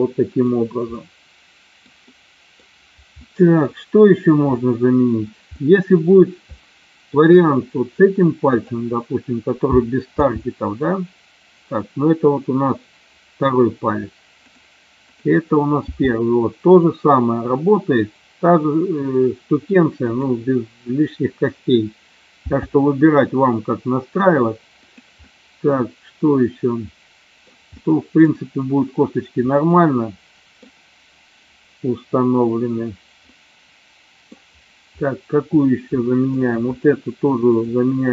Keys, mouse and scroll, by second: 1.2-1.9 middle drag, 2.3-2.6 middle drag, 3.4-3.8 middle drag, 4.6 middle click, 5.6 middle drag, 6.6-7.1 shift+middle drag, 8.6 click, 10.1 g, 14.5 click, 15.1 click, 16.0 g, 20.1 click, 22.5 g, 24.9 click, 25.4-27.5 middle drag, 27.8 scroll up 1, 27.9-28.4 middle drag, 29.5-30.8 middle drag, 33.4 scroll up 1, 33.5 middle click, 36.1 shift+middle click, 36.4 shift+scroll down 1, 36.8 click, 37.7 click.